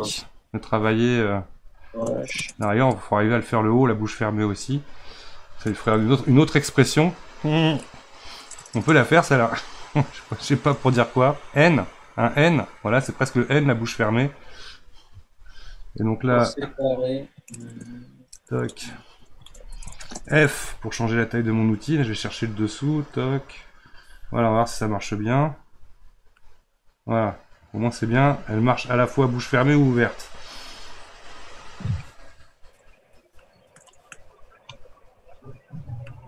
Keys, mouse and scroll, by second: 16.9-19.9 middle drag, 20.5 f, 22.3-28.1 drag, 28.5-30.6 middle drag, 30.6 click.